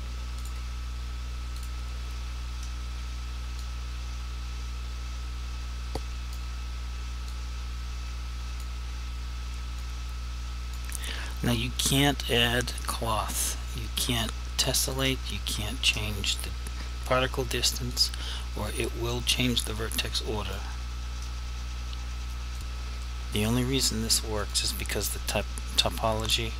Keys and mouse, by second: 0.4 shift+click, 3.7 click, 7.4 click, 9.9 click, 11.6 click, 17.9 click, 19.2 click, 22.6 click.